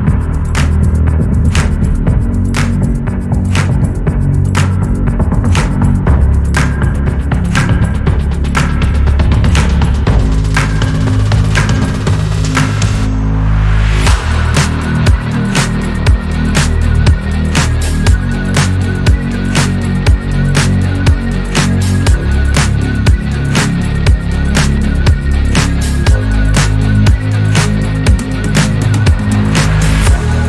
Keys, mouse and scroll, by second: 1.4 click, 2.4 click, 4.1 2, 4.5 alt+click, 5.1 click, 6.4-8.2 shift+middle drag, 8.2 ctrl+r, 9.8 click, 11.3 alt+click, 11.8 click, 14.0 Tab, 14.2-14.6 scroll down 1, 14.6 shift+middle drag, 14.9 scroll down 1, 15.0 scroll up 1, 15.4 Tab, 16.7 alt+click, 17.3 click, 18.4 alt+click, 19.0 click, 20.7 Tab, 21.0 scroll down 1, 21.4-21.8 shift+middle drag, 21.8 scroll down 1, 22.4-23.1 middle drag, 23.1-23.6 scroll up 4, 23.9 Tab, 24.4 shift+middle click, 25.2 a, 25.4 a, 26.2 shift+middle click, 27.1 ctrl+a, 27.3 Tab, 27.8 ctrl+a, 28.5 Tab, 29.1 middle click, 29.4 q.